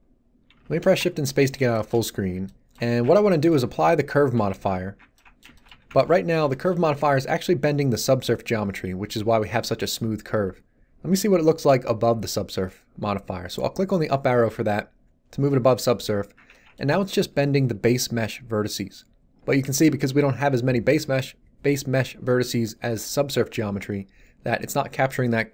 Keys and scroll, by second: 0.8 shift+space, 4.3 1, 5.7 z.